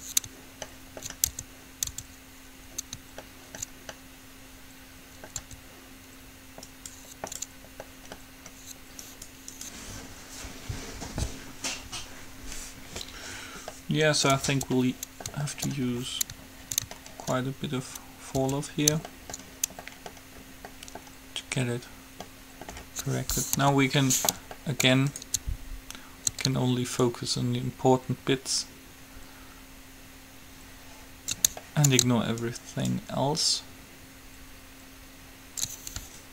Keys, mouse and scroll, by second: 0.1 Tab, 1.5 Tab, 2.1 Tab, 5.7 Tab, 7.1-8.2 right drag, 8.2 click, 10.3-13.3 right drag, 14.1 middle click, 14.7 Tab, 18.6 Tab, 22.4 middle click, 23.9 KP_3, 24.2-26.9 middle drag, 25.4-27.2 right drag, 27.4-29.1 ctrl+drag, 31.9-34.2 middle drag, 32.6-35.4 drag.